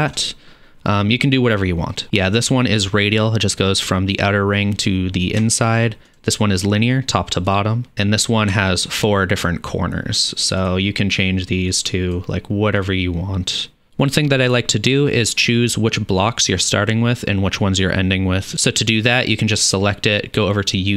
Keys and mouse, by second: 0.1-6.1 middle drag, 6.1-7.4 drag, 8.0 drag, 8.3-10.1 shift+middle drag, 10.1 click, 10.2-12.8 middle drag, 12.8 click, 12.9 middle click, 19.0 click.